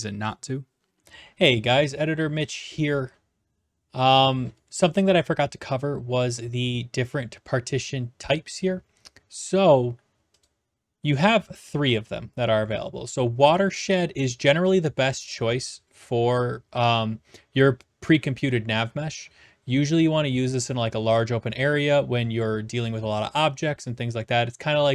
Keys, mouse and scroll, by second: 0.0-0.5 typing.